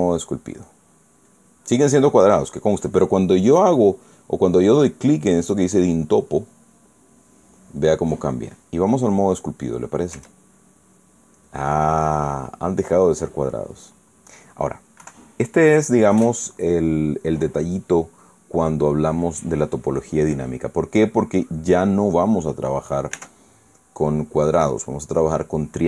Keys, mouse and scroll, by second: 0.7 click, 2.0 click, 7.2 click, 10.9 Tab, 12.6-15.4 drag, 15.7 KP_1, 20.7-21.3 scroll down 2, 23.9 Tab.